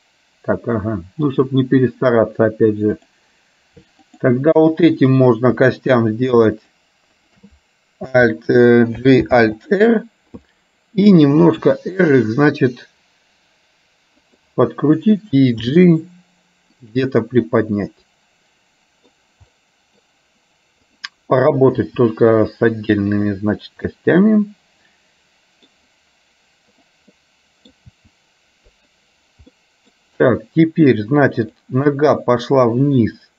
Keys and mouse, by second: 3.1 click, 4.1 click, 5.3 shift+click, 7.2 shift+click, 9.2 alt+g, 9.6 alt+r, 11.8 r, 17.7-19.2 middle drag, 19.7 middle click, 21.8 r, 23.9-25.7 middle drag, 26.8 click, 27.2 middle click, 28.1 r, 29.6 middle click, 31.6 click.